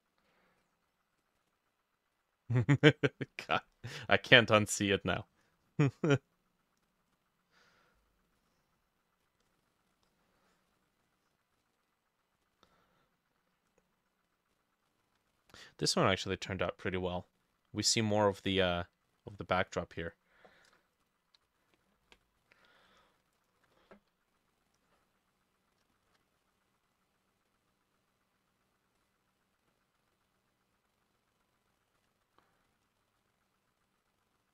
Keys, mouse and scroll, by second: 1.5-3.5 drag, 7.1-9.1 drag, 11.1-14.7 drag, 21.4 Insert, 23.4 ctrl+click, 26.0 shift+click, 30.2 double click, 32.3-34.5 shift+drag, 32.3 middle click, 32.9 middle click.